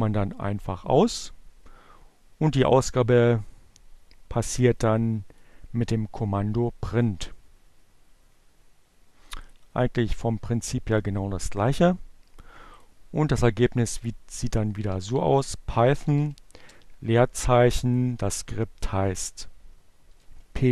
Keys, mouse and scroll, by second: 3.6 click, 7.5 click, 11.6 click, 13.4-15.6 typing, 18.5-19.6 typing, 20.6 y.